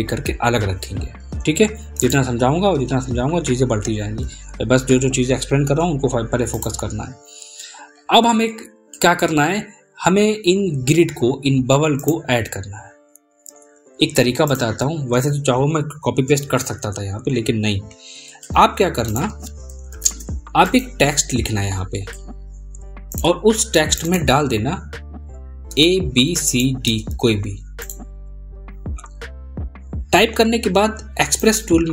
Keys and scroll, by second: 22.9 ctrl+a.